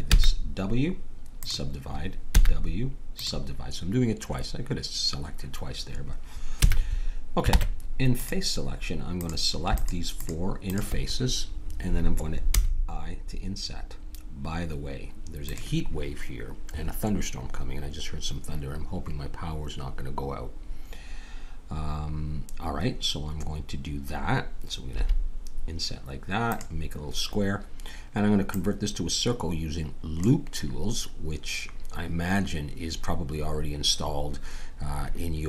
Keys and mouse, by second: 0.1 w, 2.3 w, 6.5 a, 7.5 ctrl+Tab, 9.2-12.5 drag, 12.5 i, 24.9 s, 28.4-30.4 drag.